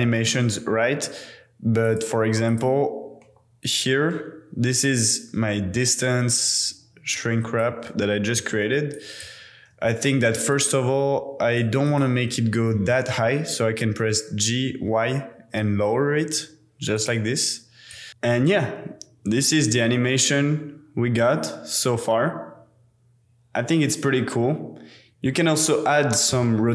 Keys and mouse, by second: 0.3 n, 1.8 click, 2.5 click, 3.2 KP_Decimal, 7.1-7.6 drag, 7.8 space, 8.4 space, 8.9-9.2 drag, 10.4 click, 10.6 click, 11.6 middle drag, 11.9 click, 12.7 g, 13.1 y, 17.0 click, 17.9 click, 18.3-18.9 drag, 19.5 click, 26.2 click, 26.5-26.7 middle drag.